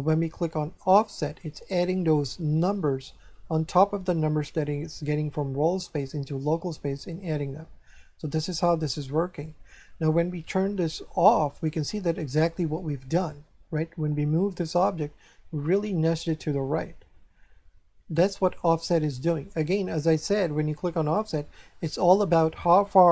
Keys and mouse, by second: 0.9 click, 11.5 click, 18.1 click, 21.0 click.